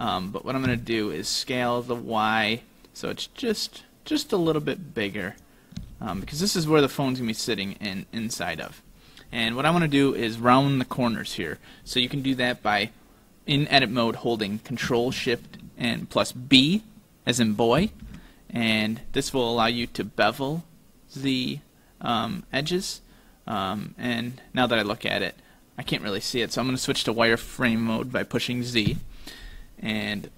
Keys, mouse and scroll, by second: 5.8 s, 17.8 ctrl+shift+b, 29.0 z.